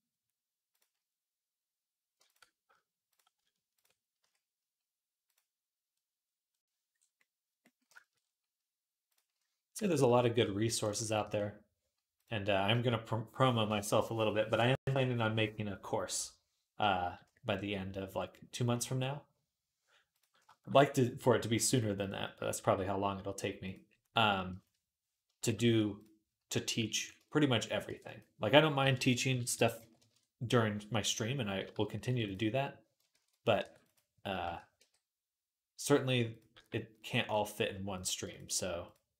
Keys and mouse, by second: 0.6-2.1 middle drag, 2.1 ctrl+click, 2.9 shift+click, 3.6 ctrl+click, 4.0 q, 7.7-8.9 shift+middle drag, 8.9 click, 8.9-20.0 middle drag, 11.0 q, 20.0-21.9 shift+drag, 21.9-25.7 middle drag, 22.4 g, 25.3 shift+Tab, 26.8 ctrl+click, 27.7 e, 28.6 ., 29.3 s, 31.9 ctrl+r, 33.0 ctrl+z, 33.4 ctrl+r, 34.2 shift+Tab, 34.6 g, 34.6 click, 34.6 right click, 35.7-39.1 middle drag, 36.3 g.